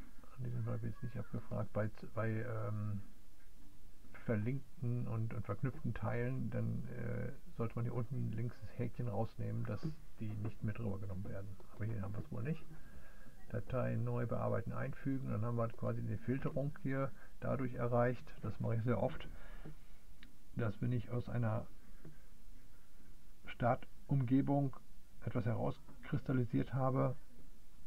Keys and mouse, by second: 12.8 click, 13.6 click, 14.3 click, 15.2 click.